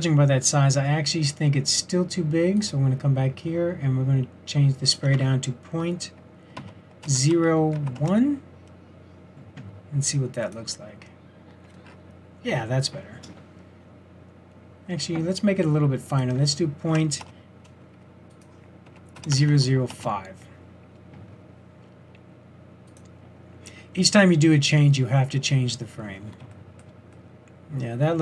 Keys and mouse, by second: 16.1-18.2 drag, 18.3 click, 19.3 KP_0.